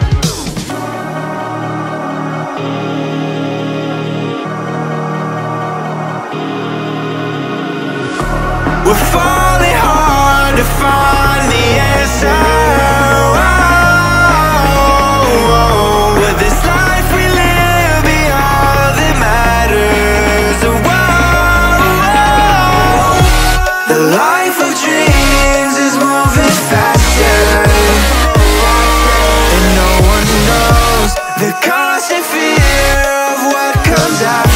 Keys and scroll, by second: 4.5 space, 16.6 space, 22.7 space, 23.4 Down, 31.3 Tab, 31.7 ctrl+v.